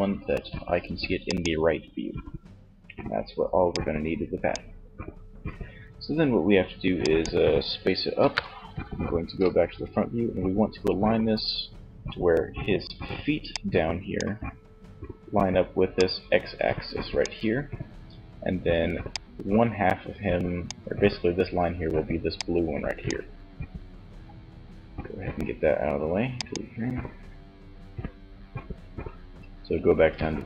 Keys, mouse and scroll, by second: 2.7-4.7 drag, 6.2-8.0 drag, 7.4 KP_1, 11.9 d, 12.4 d, 13.0-14.5 drag, 13.0 d, 15.2 d, 16.5 d, 17.9 d, 18.2 click, 21.3 d, 21.9-23.4 drag, 25.3-27.0 drag.